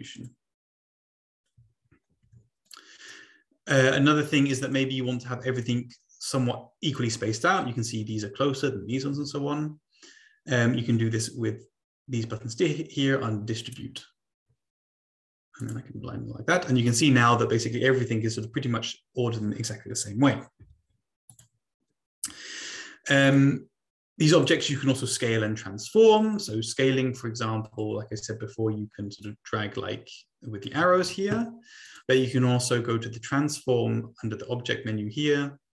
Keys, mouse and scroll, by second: 0.1 click, 2.1 ctrl+z, 2.6 click, 3.0 click, 4.3 click, 5.0 click, 6.2 click, 13.6 click, 15.6 click, 21.4 click, 21.5-22.9 scroll down 2, 23.3 click, 24.4 click, 24.6 click, 26.0 click, 27.7 click, 29.2-30.6 drag, 30.9 ctrl+z, 32.0 click.